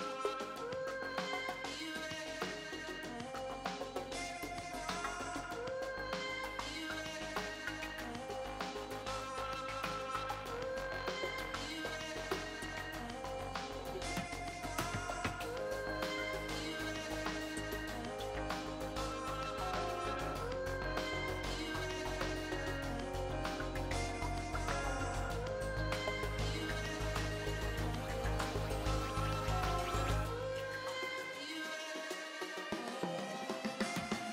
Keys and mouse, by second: 2.5 ctrl+r, 4.4 ctrl+r, 5.8 ctrl+r, 8.1 ctrl+r, 9.9-11.9 drag, 13.2-14.9 middle drag, 15.1-20.7 middle drag, 20.7-21.9 drag, 21.9 middle click, 22.4 click, 23.0 middle click, 23.9-25.8 right drag, 24.9-26.4 drag, 26.4 middle click, 27.2 ctrl+z, 28.8 KP_1, 29.7 z, 30.5 b, 31.6-33.5 drag.